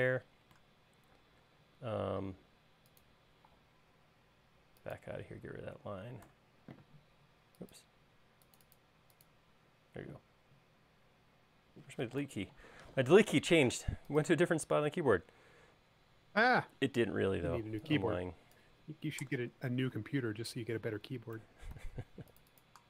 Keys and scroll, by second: 1.4 space, 4.1 Escape, 6.5 BackSpace, 12.4 BackSpace, 20.2 super+c, 22.0 super+x.